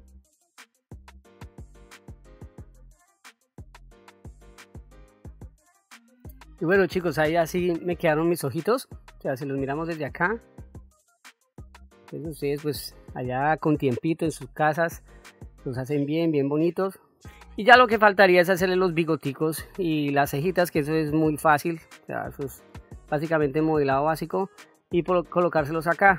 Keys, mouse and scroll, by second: 0.2 click, 0.8 click, 1.1 click, 1.4 f, 2.1 click, 2.3 click, 2.6 click, 3.2 f, 3.5 click, 3.8 click, 4.3 ctrl+middle click, 4.8 ctrl+middle click, 5.5 middle click, 8.8 click, 11.1 click, 12.2 middle click, 16.4 middle click, 21.8 middle click, 23.2 middle click.